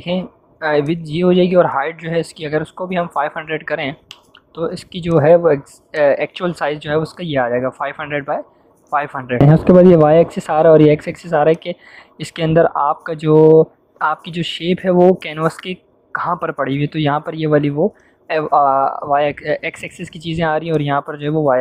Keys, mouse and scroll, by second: 0.8-1.7 drag, 2.4-3.5 typing, 3.9 Return, 5.0 click, 9.3 click, 11.4-19.9 drag.